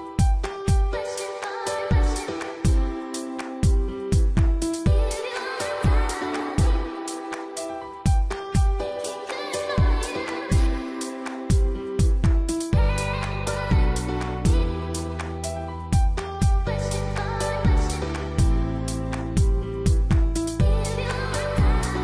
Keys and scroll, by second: 3.2 ctrl++, 9.7 ctrl+space, 10.7 ctrl+alt+z.